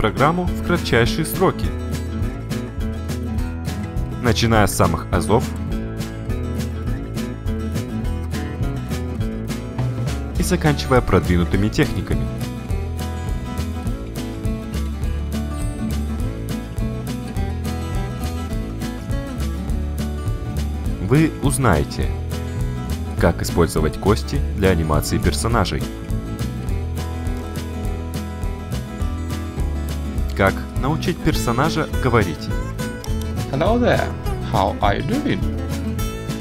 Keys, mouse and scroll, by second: 27.2 click, 32.6 click, 35.8 click.